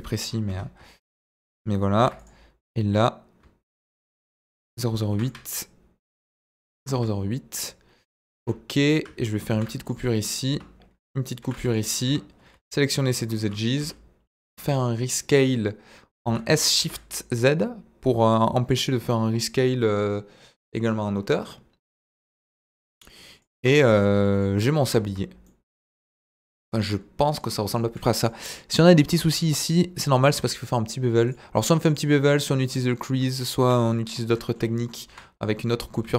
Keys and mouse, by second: 0.5 Tab, 1.9 ctrl+r, 4.3 ctrl+click, 5.1 ctrl+r, 7.0 Tab, 8.3 Tab, 9.5 ctrl+r, 10.5 Escape, 11.4 ctrl+r, 12.0 Escape, 13.8 s, 14.4 Escape, 16.2 s, 16.7 shift+z, 23.3 click, 23.7 Tab, 24.3 click, 24.9 z, 25.4-26.2 middle drag, 27.2 middle drag, 28.2-28.6 middle drag, 29.3 Tab, 29.7 middle click, 31.8 click, 32.6 middle click, 33.9 middle click, 35.0 KP_1.